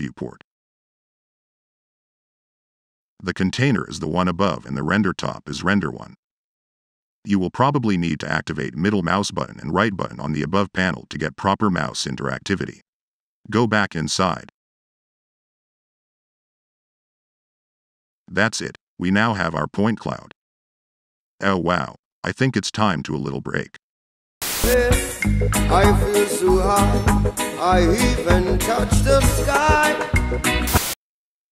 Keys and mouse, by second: 1.0 click, 2.6 click, 3.2 click, 5.2 click, 7.7 click, 8.2 click, 10.7 click, 11.3 click, 12.1 click, 14.1 u, 14.9 click, 16.6 middle click, 18.1-18.4 drag, 19.5 middle click, 19.9 middle click, 20.0 click, 20.7 click, 21.3 click, 31.4-31.5 drag.